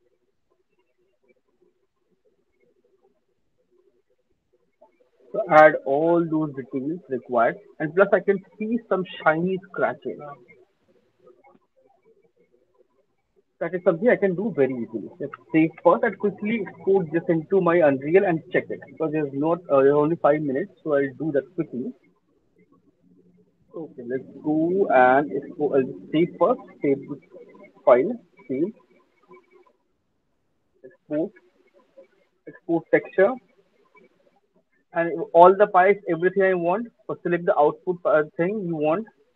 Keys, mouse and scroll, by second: 1.8 click, 2.8 shift+click, 3.7 shift+click, 3.7 alt+middle click, 3.8 alt+right click, 4.0 alt+right click, 4.5 alt+middle click, 4.8 alt+click, 5.2 alt+middle click, 11.6 alt+middle click, 11.6 alt+right click, 12.0 alt+click, 12.4 alt+middle click, 12.8 alt+right click, 13.3 alt+middle click, 14.1 alt+click, 15.2 ctrl+s, 20.4 right click, 21.3 click, 27.4 click, 28.0 ctrl+s, 30.9 click, 32.9 click, 37.8 click, 38.6-39.3 scroll.